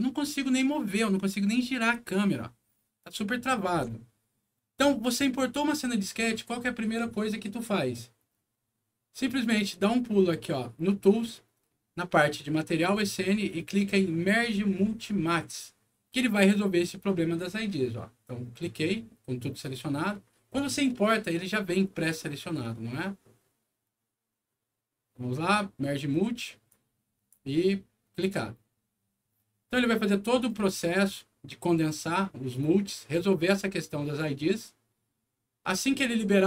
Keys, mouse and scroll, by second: 26.6 click.